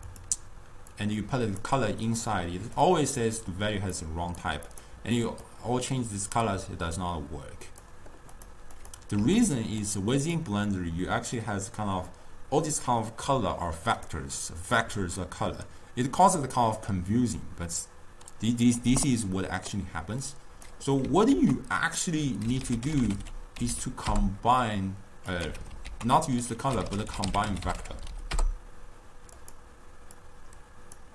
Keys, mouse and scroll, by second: 1.0-2.9 drag, 4.0 click, 4.8 click, 8.4 drag, 8.8 click, 9.7 x, 9.9 click, 20.3-21.4 drag, 21.4 ctrl+a, 25.9 x, 26.0 ctrl+a, 28.1 Down, 30.2 drag.